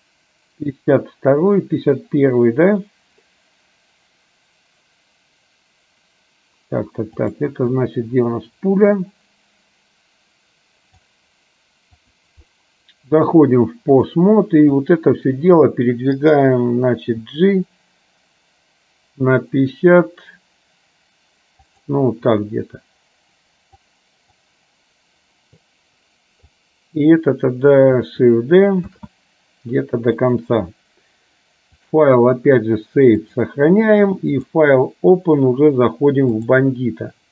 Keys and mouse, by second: 7.4 click, 7.9-11.2 drag, 12.0 click, 13.3-14.3 drag, 14.8 click, 17.3 g, 23.9 click, 26.7 click, 29.2 shift+d, 31.9-33.5 drag, 34.7-36.9 drag.